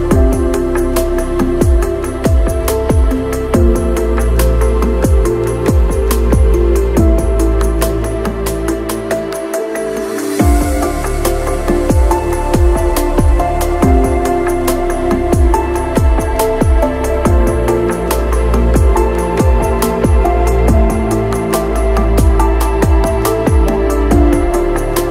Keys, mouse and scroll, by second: 5.5 KP_0, 5.7 ctrl+middle click, 6.0 shift+middle click, 6.3 shift+s, 7.9-8.9 typing, 9.5 click, 9.5 middle click, 9.7 click, 10.6 middle click, 11.5 click, 12.2 click, 12.7 click, 13.0 click, 13.6 click, 14.4 click, 15.3 middle click, 15.5 middle click, 16.4 middle click, 18.5 middle click, 18.8 click, 23.7 KP_0, 24.1 click, 24.6 Tab.